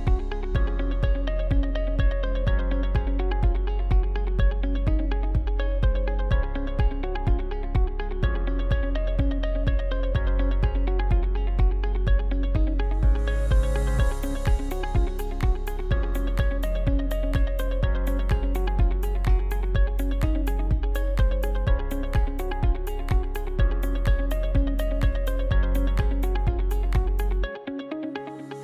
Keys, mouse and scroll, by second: 0.0 s, 3.7 right click, 4.8 ctrl+r, 6.3 ctrl+r, 8.1 right click, 8.5 shift+right click, 9.1 ctrl+z, 9.4 shift+right click, 10.2 f, 10.8 alt+right click, 11.8 f, 12.4 alt+right click, 13.5 shift+middle click, 14.4 scroll up 2, 14.8-16.1 middle drag, 16.1 right click, 16.5 shift+right click, 17.2 f, 17.7 alt+right click, 18.6 f, 19.4 alt+right click, 20.3 f, 21.0 right click, 21.3-21.7 scroll down 3, 21.7-24.7 shift+middle drag, 24.7 shift+right click, 25.9 f, 26.8 right click, 27.6 right click, 28.1 scroll down 2, 28.5-28.6 shift+middle drag.